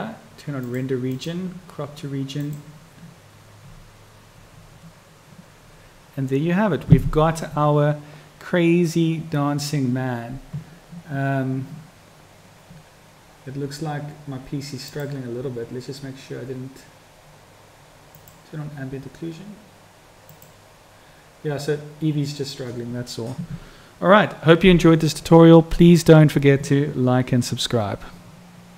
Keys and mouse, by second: 20.5-24.6 drag.